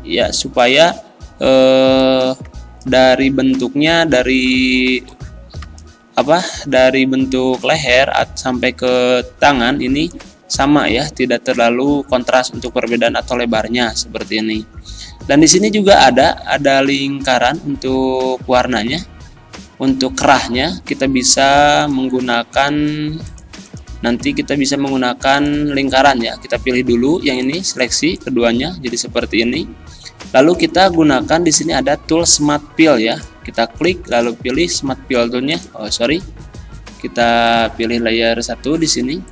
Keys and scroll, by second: 29.2 ctrl+z.